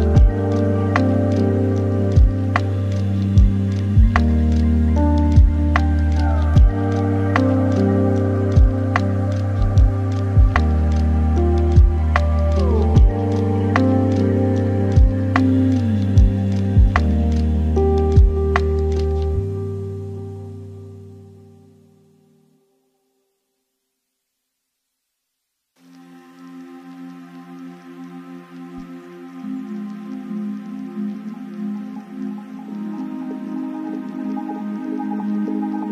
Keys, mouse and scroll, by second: 0.0-3.6 drag, 4.6-14.0 drag, 14.0 x, 15.7-18.7 middle drag, 21.3-35.9 drag.